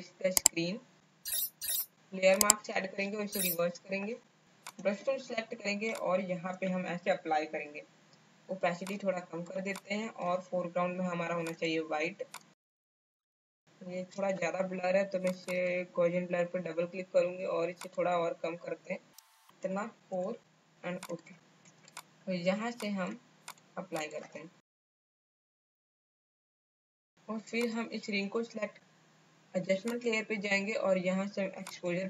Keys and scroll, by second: 3.4 ctrl+i, 5.8 space, 12.9 space, 13.4 space, 13.6 space, 20.1 KP_4, 21.4 space, 24.8-26.7 typing.